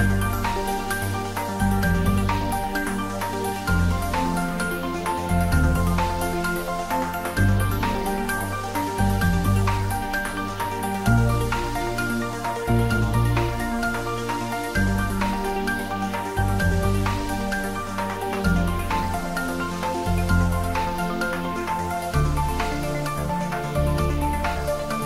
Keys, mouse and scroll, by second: 3.8 Tab, 5.0 click, 6.0 ctrl+s, 8.9 ctrl+s, 8.9-10.7 ctrl+middle drag, 10.7 Tab, 11.3 click, 11.6 Tab, 12.5 click, 13.9 Return, 14.6 Tab, 15.0 click, 16.5 click, 16.6 ctrl+s, 19.4 ctrl+s, 19.7-20.9 ctrl+middle drag, 20.9 click, 24.9 ctrl+s.